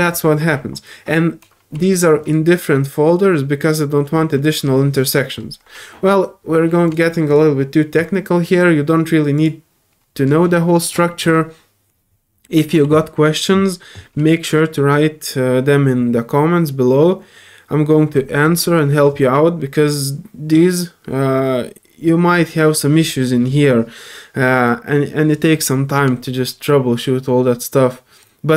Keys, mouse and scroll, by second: 2.2 click, 4.3 scroll up 1, 6.8 click, 7.3 click, 9.3 click, 28.2 click, 28.2-28.5 typing.